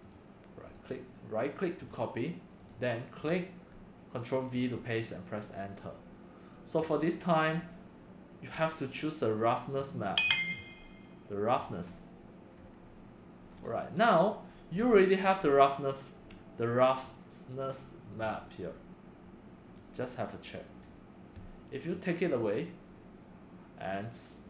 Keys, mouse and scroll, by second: 1.7 click, 2.0 click, 2.6 click, 3.1 click, 4.4 ctrl+v, 5.1 Return, 6.7 click, 9.9 click, 11.5 click, 13.4 scroll down 3, 14.7-15.4 middle drag, 14.7 scroll, 15.4 scroll, 17.2-18.2 right drag, 18.1 drag, 19.6 click, 19.7 scroll, 22.4 click.